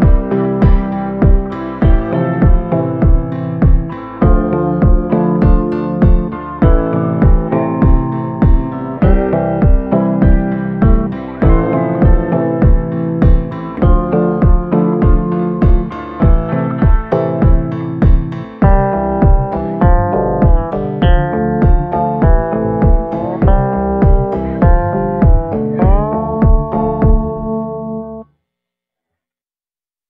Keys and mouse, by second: 0.8 right click, 1.3 ctrl+z, 1.3 [, 1.5 [, 2.8 ctrl+z, 4.8-6.4 middle drag, 7.7 shift+middle click, 9.2 shift+middle click, 11.8 middle click, 12.3 shift+middle click, 12.9 middle click, 16.6 middle click, 17.2 middle click, 17.8 middle click, 18.4 middle click, 19.6 middle click, 20.7 shift+middle click, 21.4 shift+middle click, 22.4 middle click, 23.0 shift+middle click, 23.6-26.5 middle drag, 27.6 ctrl+i, 28.1 middle click, 28.6 middle click.